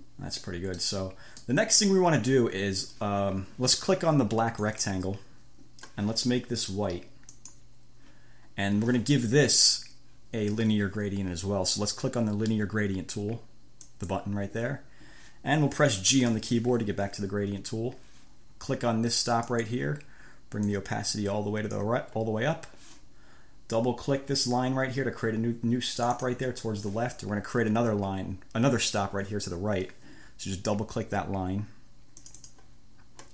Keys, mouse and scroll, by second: 0.0 scroll, 1.7 o, 1.9 scroll, 2.5 click, 4.8 click, 7.6 click, 14.0 click, 16.6 g, 19.8 click, 21.0-22.2 drag, 26.2 click, 32.4 click.